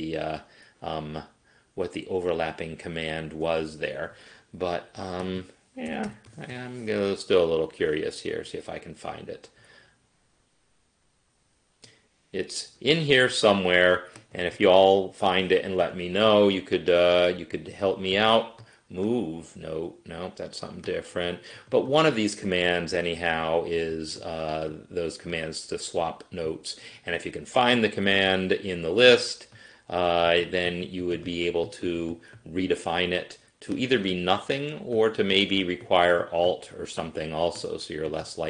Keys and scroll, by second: 5.7-7.1 typing.